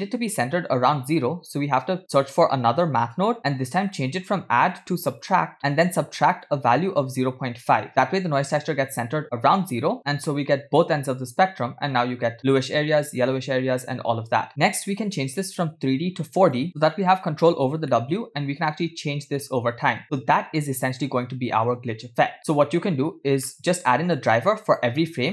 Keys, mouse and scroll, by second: 1.8 shift+a, 5.2 click, 6.5-7.6 drag, 15.1-16.7 drag, 17.9 middle click, 18.7-22.4 drag, 23.9 middle click, 24.7-25.3 drag.